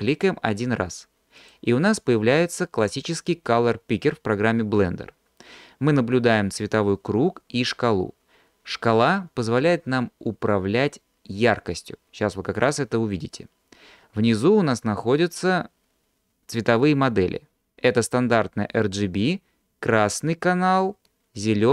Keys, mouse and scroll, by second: 1.4 click.